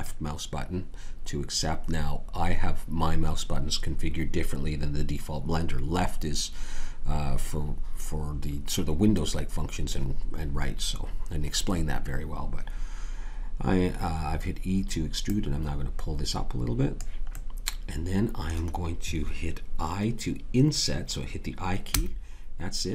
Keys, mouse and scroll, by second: 15.2-17.3 right drag, 21.9 i.